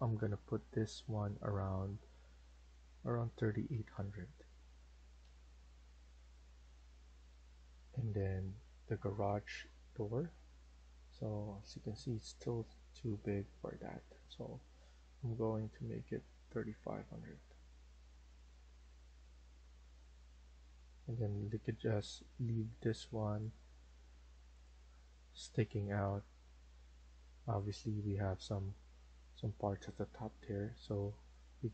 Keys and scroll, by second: 2.7-4.1 typing, 5.1 BackSpace, 7.2 Escape, 7.6 Escape, 16.1-17.4 typing, 21.4 Escape, 25.1-26.2 typing, 27.7 Escape, 28.0 Escape.